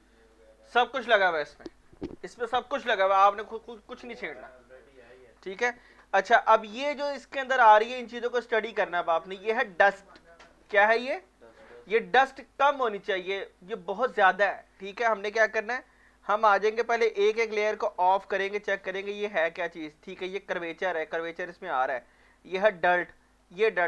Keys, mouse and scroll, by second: 0.1 alt+right click, 0.4 alt+click, 6.5 alt+click, 7.0 alt+right click, 8.2 alt+click, 11.8 alt+Num_Lock, 11.8 alt+click, 11.9 alt+right click, 12.6 click, 13.4 right click, 18.0 click, 23.0 click.